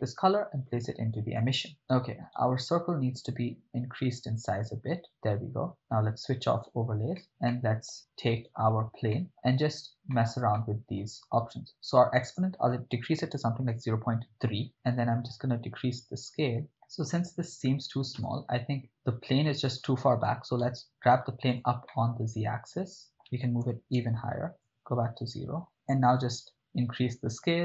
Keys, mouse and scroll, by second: 0.3-0.7 drag, 2.4-2.9 right drag, 3.6 s, 5.1 click, 5.8 click, 7.2 ctrl+middle click, 7.5-7.9 middle drag, 8.5 right click, 9.1 middle click, 10.1 middle click, 10.6 ctrl+middle click, 12.2-14.1 drag, 15.1-16.6 drag, 16.6 middle click, 16.6 x, 18.3 KP_0, 18.9-19.8 middle drag, 20.2 g, 20.6 z, 21.5 click, 21.9-23.3 middle drag, 23.6 g, 23.9 z, 24.6 click, 24.6 KP_0, 26.2-27.6 drag.